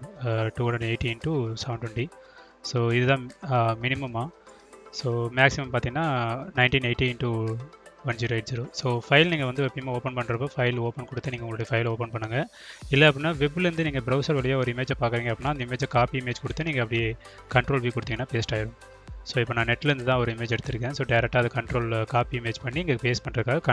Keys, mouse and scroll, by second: 0.2 Tab, 11.2 ctrl+v, 13.0-14.3 drag, 15.4 click, 16.4 click, 17.1-18.5 drag, 19.0-20.8 drag, 22.4-23.7 drag.